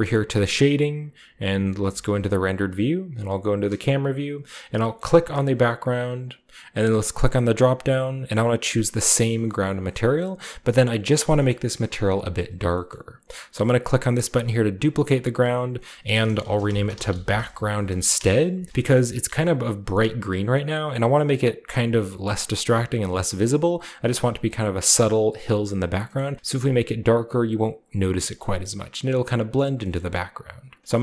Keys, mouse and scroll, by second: 0.3-1.8 drag, 1.8 z, 2.9 KP_0, 4.0-4.4 shift+scroll up 1, 5.0-5.9 middle drag, 5.4-6.2 right drag, 5.9 shift+scroll up 1, 7.0 middle click, 9.7 drag, 11.2 scroll down 1, 11.7 scroll down 1, 12.8-13.4 scroll down 1, 14.8 click, 15.7 click, 16.4-19.3 typing, 18.9-20.6 shift+middle drag, 18.9-20.6 shift+scroll up 1, 21.8-22.7 typing, 21.9 right click, 23.1-23.6 scroll down 2, 24.2-24.9 scroll down 1, 24.9-26.0 scroll up 1, 26.1-27.8 middle drag, 28.1-29.6 scroll down 1, 28.4-29.9 middle drag, 29.9 middle click.